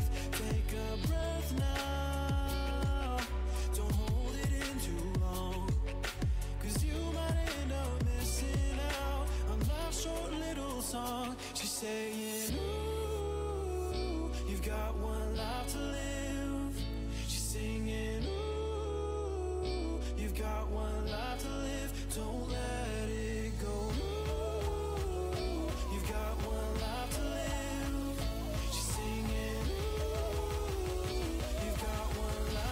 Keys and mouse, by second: 0.5 click, 1.2-3.4 middle drag, 5.0-6.2 middle drag, 21.4-23.1 drag, 23.1 middle click, 24.9 ctrl+z, 28.2-29.6 drag, 29.6-30.6 right drag, 32.2 ctrl+z.